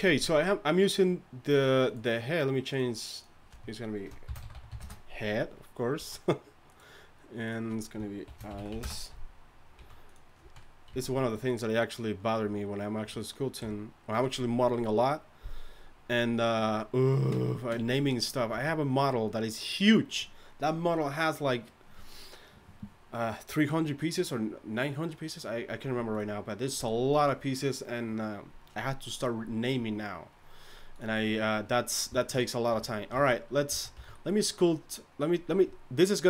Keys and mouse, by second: 0.2 z, 6.0 z, 9.7 z, 10.4 z, 10.9 z, 13.6 KP_1, 18.5 a, 32.7 a, 33.1 z, 33.7 z, 33.9 a.